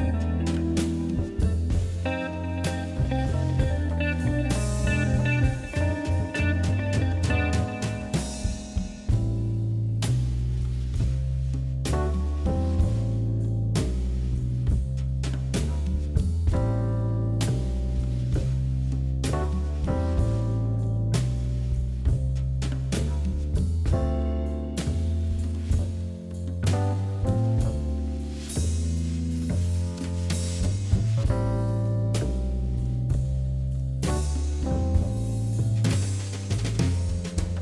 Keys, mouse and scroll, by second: 1.2-1.6 scroll down 3, 1.8 middle click, 2.5 click, 2.7 shift+click, 3.2 KP_1, 3.9 g, 5.1 shift+click, 5.4 shift+click, 6.1 click, 6.6 shift+click, 6.9 shift+click, 7.5-9.0 shift+middle drag, 9.3 g, 10.5 click, 11.0 shift+click, 11.6 g, 13.3 scroll down 3, 13.5-14.8 shift+middle drag, 14.8 KP_3, 15.3 shift+z, 15.5 scroll down 1, 15.8 shift+z, 16.2 Tab, 16.4 click, 16.6-18.1 middle drag, 20.1 scroll up 1, 20.4 middle click, 21.1-21.4 scroll up 2, 21.4-22.6 shift+middle drag, 22.6 KP_1, 23.2-23.7 scroll up 1, 23.7 shift+middle click, 23.9-24.5 scroll down 3, 24.5 click, 25.6 g, 26.7 z, 28.0 scroll up 3, 28.3 click, 28.6-29.3 scroll down 3, 29.3-32.2 drag, 32.9 click, 34.6-35.0 scroll up 2, 35.0 shift+middle click, 35.1 middle click, 35.4-36.8 scroll up 1, 36.8-37.6 drag.